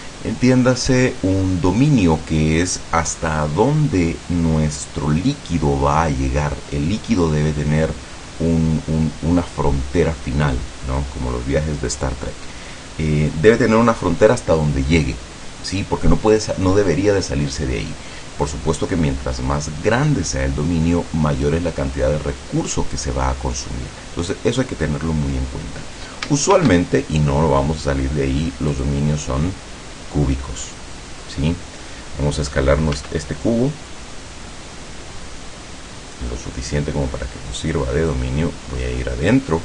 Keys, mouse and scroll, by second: 26.6 shift+a, 28.8 click, 33.0 s, 37.7 click, 38.5-39.2 scroll up 2.